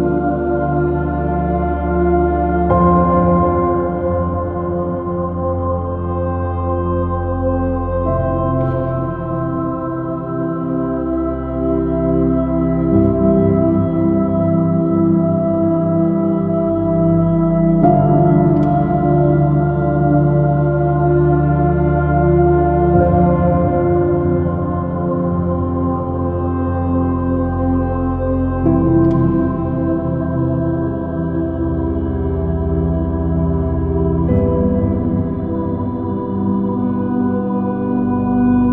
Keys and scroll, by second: 5.4 super+z, 12.8 super+i, 12.9 super+space, 15.8 super+-, 17.9 super+-, 30.4 super+v, 34.9 super+-, 36.0 super+i, 37.9 BackSpace.